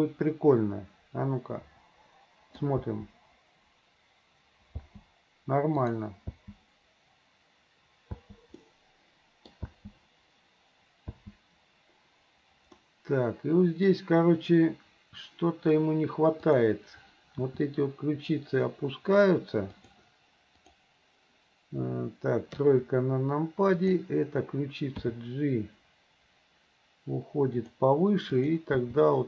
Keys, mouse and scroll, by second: 2.9 space, 4.7 space, 5.9 click, 6.3 space, 8.2 space, 8.6 middle click, 9.7 space, 11.1 space, 12.8-13.9 middle drag, 16.5 click, 17.4 r, 20.6 click, 22.5 KP_3, 23.8 click, 25.1 g, 28.5 click, 28.8 g.